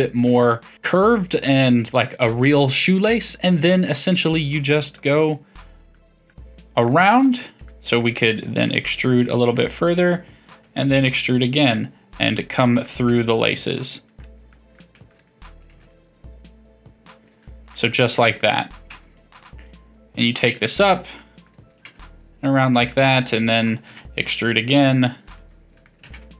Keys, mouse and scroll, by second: 3.8-4.9 middle drag, 4.9 click, 5.9-8.6 middle drag, 8.6 e, 9.7-10.4 middle drag, 10.4 e, 12.3-13.1 middle drag, 13.1 g, 14.2 click, 14.5 middle click, 15.1 click, 15.7 g, 17.3-18.1 middle drag, 18.1 click, 18.4-18.9 middle drag, 18.9 g, 20.6-21.8 middle drag, 21.8 g, 22.9-23.9 middle drag, 23.9 e, 25.4 middle click, 26.0 e.